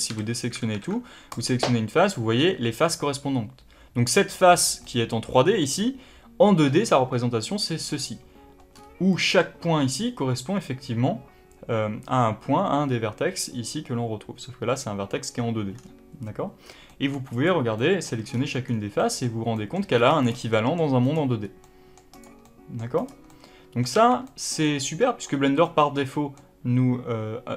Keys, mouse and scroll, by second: 0.0 a, 1.2 click, 4.7-17.2 middle drag, 8.6-9.0 scroll up 2, 15.7-16.5 scroll down 2, 16.5 scroll down 1, 17.2 click, 17.7-20.1 middle drag, 18.2-18.9 scroll down 2, 19.9 scroll up 2, 20.1 click, 20.4 middle click, 20.9 click, 21.3 scroll up 1, 21.5 middle click, 22.0 click, 22.3 middle click, 22.9 click, 23.2-27.5 middle drag, 23.8 a.